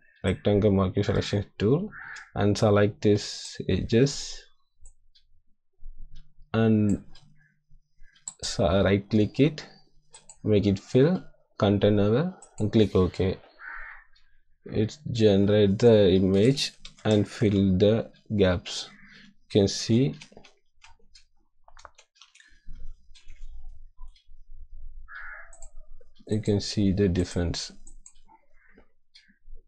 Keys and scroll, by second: 17.3 ctrl+d, 19.7 ctrl+z, 20.8 ctrl+z, 21.9 ctrl+shift+z, 23.1 ctrl+d.